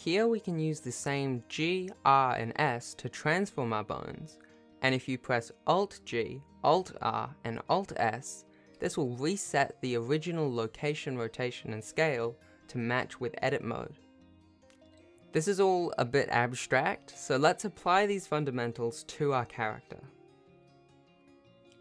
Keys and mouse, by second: 0.4 g, 1.8 r, 3.5 s, 5.2 click, 5.9 click, 6.1 click, 6.9 g, 8.2 alt+g, 9.2 alt+r, 10.0 alt+s, 11.2 Tab, 11.7 Tab, 13.0 Tab, 13.3 Tab, 15.9-16.5 shift+middle drag, 18.3 a, 19.2 alt+g, 20.2 alt+r, 21.3 alt+s.